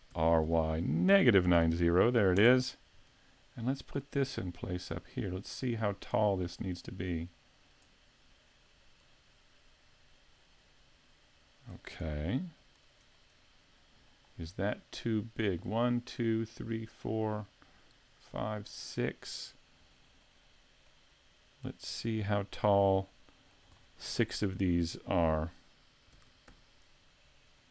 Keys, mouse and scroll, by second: 0.1 r, 4.3 click, 9.0 click, 12.3 alt+click, 13.2 middle click, 14.1 shift+middle click, 20.2 middle click, 21.7 right click, 22.5 shift+right click, 23.1 middle click, 23.8 shift+middle click, 24.3 scroll up 2, 24.6 shift+middle click, 26.2 shift+d.